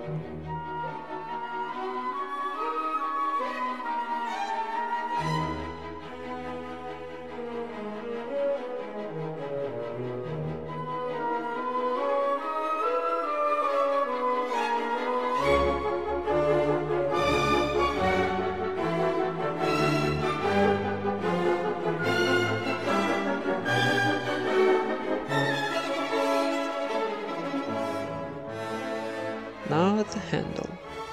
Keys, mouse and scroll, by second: 0.0 middle click, 1.5 click, 1.8 Tab, 2.7 z, 3.0 ctrl+Tab, 3.3 click, 3.7 ctrl+KP_Add, 4.4 e, 4.7 s, 6.5 e, 6.9 g, 7.6 s, 8.5 Tab, 9.1 Tab, 10.0 a, 10.2 right click, 10.4 s, 11.2 Tab, 11.5 middle click, 11.8 Tab, 12.4 click, 12.7 ctrl+KP_Add, 13.0 ctrl+KP_Add, 13.2 ctrl+KP_Add, 13.5 click, 13.7 s, 14.9 KP_1, 15.4 z, 16.9 s, 17.6 Tab, 17.7 z, 18.7 Tab, 19.2 ctrl+r, 20.0 Tab, 21.0 ctrl+r, 21.2 click, 22.2 alt+s, 23.0 Tab, 23.0 click, 24.6 Tab, 25.0 a, 25.1 right click, 25.5 g, 26.5 Tab, 27.1 KP_1, 27.9 ctrl+s, 28.2 a, 28.5 ctrl+s, 28.7 z, 29.8 shift+a.